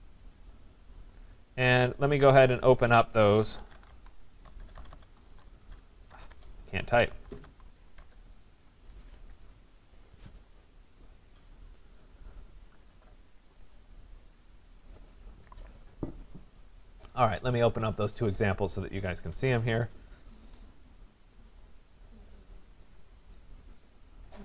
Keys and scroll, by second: 4.6 BackSpace, 8.0 Return.